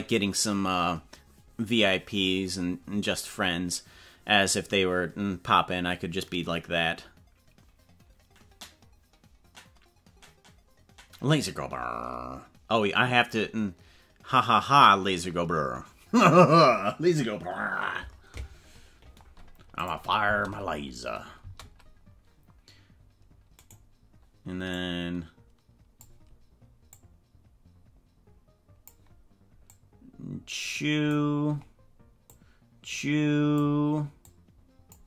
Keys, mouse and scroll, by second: 19.8 click, 20.2 space, 21.4 space, 23.7 right click, 24.7-26.1 drag, 26.9-28.9 drag, 29.7-31.1 drag, 32.3-33.7 drag, 34.3 click.